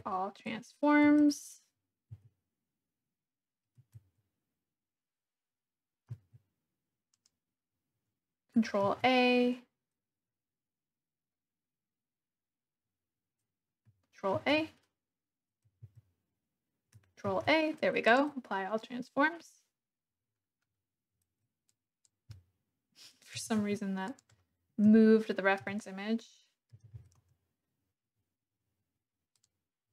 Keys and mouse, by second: 0.5 Tab, 1.9 Tab, 2.6 Tab, 2.6 a, 4.7 Tab, 6.1 a, 7.2 click, 8.8 ctrl+a, 14.3 ctrl+a, 16.3 Tab, 17.2 ctrl+a, 21.6-22.1 drag, 22.4 click, 23.4 g, 23.6 z, 24.1 click, 24.8 KP_1, 25.6 r, 26.7 x, 26.9 9, 27.0 0, 27.2 Return, 29.3 click.